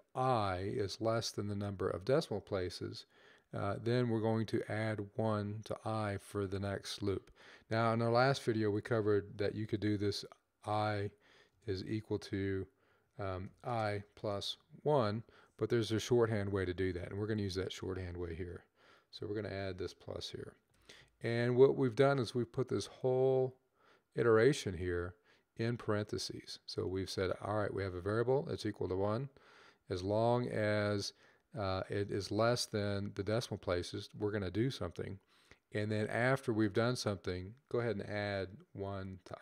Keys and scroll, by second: 8.3 =, 9.4 typing, 10.9-11.5 typing, 13.1 typing, 14.2 typing, 15.9-17.4 typing, 18.9 typing, 20.5 typing.